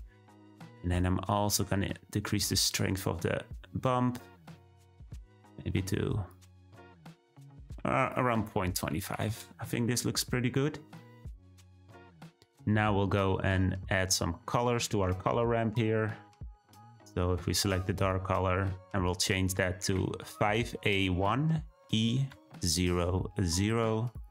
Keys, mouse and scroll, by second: 2.9-22.3 drag.